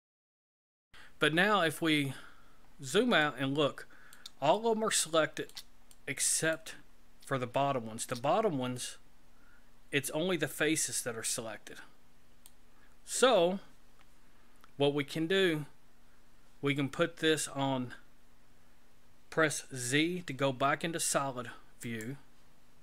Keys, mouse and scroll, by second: 0.7 shift+middle click, 2.2-2.8 scroll down 9, 3.2 middle click, 4.5 shift+middle click, 5.9 middle click, 6.8-7.4 scroll up 4, 7.5 shift+middle click, 8.7 middle click, 19.8 z.